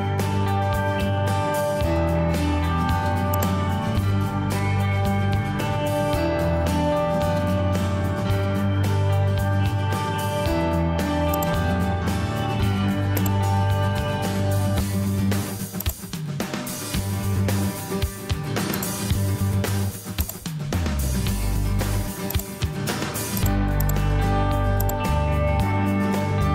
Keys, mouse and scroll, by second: 5.3 Escape, 5.9 Escape, 17.0 Escape.